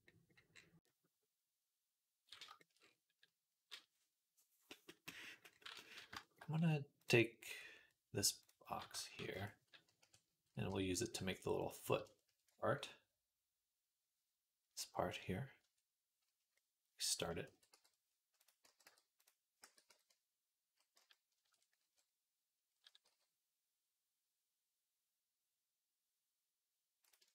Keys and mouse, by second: 6.8 click, 6.9-18.2 middle drag, 9.0 shift+d, 9.8 KP_3, 10.5 g, 15.4 Tab, 17.3 x, 18.2 click, 19.0 click, 19.0 x, 19.5 a, 19.7 s, 21.6 KP_3, 22.9 g.